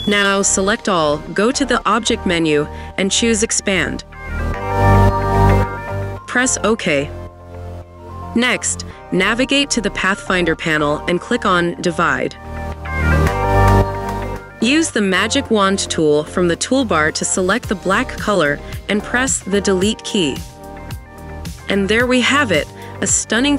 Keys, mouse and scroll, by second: 0.0 ctrl+click, 1.5 ctrl+click, 3.3 double click, 20.6 Delete.